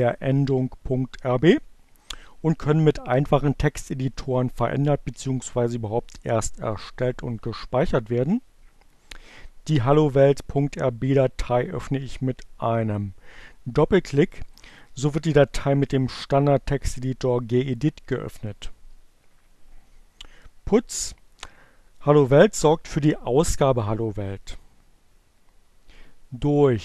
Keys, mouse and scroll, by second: 13.0-15.0 drag, 26.6 click.